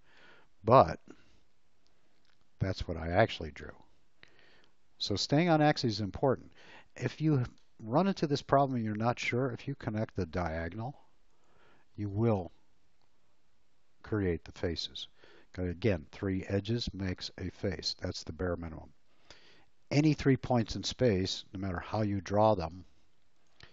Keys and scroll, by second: 9.1 l, 11.9 space, 22.2 l.